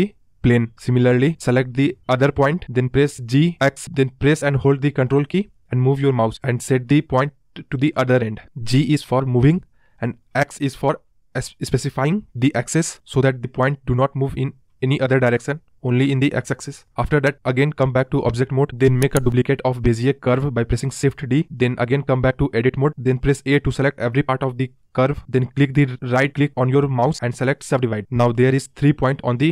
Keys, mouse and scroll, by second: 2.5 click, 3.6 g, 17.1 click, 18.0 Tab, 18.6 shift+d, 20.5 Tab, 23.0 a, 24.0-26.4 right drag, 26.4 click, 27.2 click, 27.6-28.0 scroll down 3, 28.0-29.5 scroll up 1.